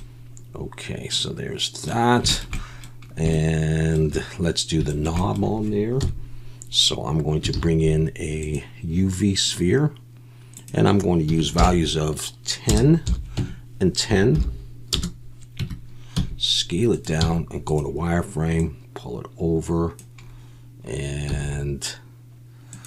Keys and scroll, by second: 6.0 KP_1, 7.5 shift+a, 15.6 Tab, 16.1 s, 17.2 z, 21.3 s.